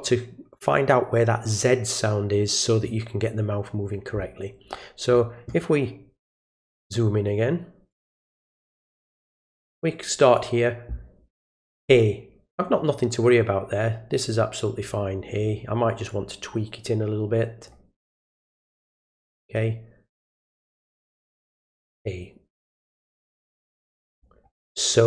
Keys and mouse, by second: 6.4 click, 7.9-10.3 drag, 16.1-17.7 drag, 18.5-19.5 drag, 22.0-24.2 drag.